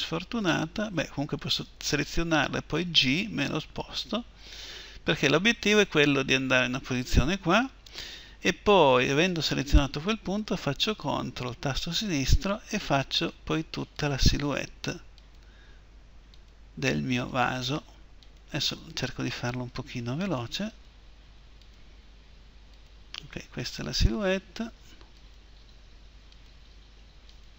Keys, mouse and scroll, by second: 1.1-2.3 right drag, 2.3 g, 8.9-10.8 drag, 12.1-27.5 drag.